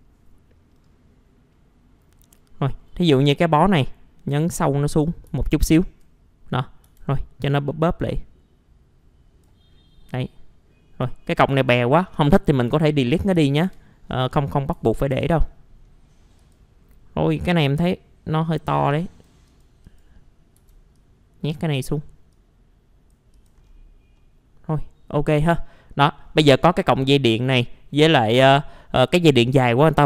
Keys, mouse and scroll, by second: 0.7 middle click, 0.8-1.3 scroll down 1, 1.5 middle click, 2.0-2.3 scroll down 1, 2.3 scroll up 1, 3.0 click, 3.5-4.0 scroll up 1, 4.3 click, 5.4 alt+middle click, 6.6 scroll up 1, 7.4-9.7 drag, 9.7-10.1 scroll down 1, 10.2 alt+middle click, 11.5 alt+middle click, 12.8 alt+middle click, 13.7 scroll down 1, 14.3 click, 14.7 F4, 15.5 middle click, 16.0 scroll up 1, 16.4 click, 16.8-17.3 scroll up 1, 17.7 click, 20.6 typing, 23.0 click, 23.6-24.1 scroll down 1, 24.1 middle click, 25.2-25.6 scroll down 1, 25.6 middle click, 26.2 scroll up 1, 28.3 middle click, 29.8-30.0 scroll down 1.